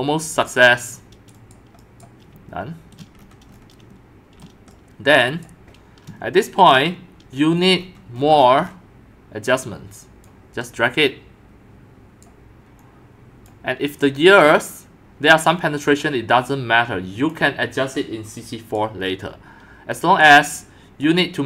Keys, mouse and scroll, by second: 1.5 right click, 2.0 right click, 2.9-3.8 shift+scroll, 3.5-5.5 middle drag, 4.4 scroll, 5.5-6.7 drag, 6.7-8.2 shift+middle drag, 6.7-7.1 shift+scroll, 7.6-8.2 scroll, 8.2-9.4 scroll up 16, 9.4-10.2 scroll up 5, 10.2 scroll, 10.3-20.4 drag, 21.0 click.